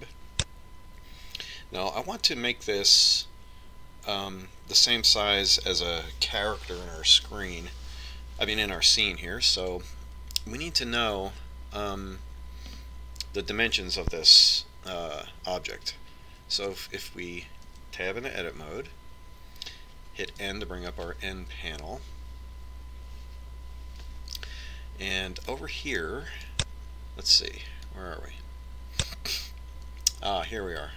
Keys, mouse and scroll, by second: 18.8 Tab, 21.4 n, 26.5-28.2 drag, 28.9-30.7 drag.